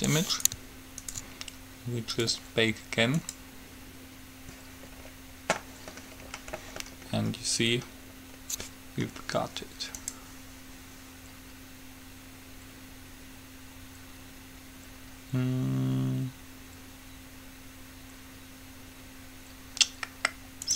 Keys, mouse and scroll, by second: 0.1 g, 1.2-2.9 right drag, 2.3-5.2 drag, 5.2-6.4 middle drag, 10.1-11.9 drag.